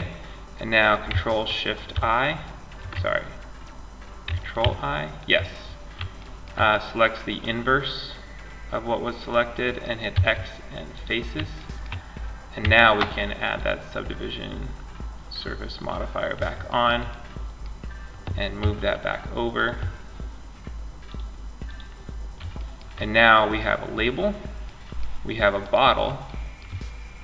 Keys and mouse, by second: 1.1 ctrl+shift+i, 3.8 ctrl+i, 5.3 middle click, 9.3 x, 11.8 Tab, 15.8-17.8 middle drag, 17.8 m, 20.2-21.7 drag, 21.7-22.8 middle drag, 24.8-25.5 right drag, 25.5-27.2 middle drag.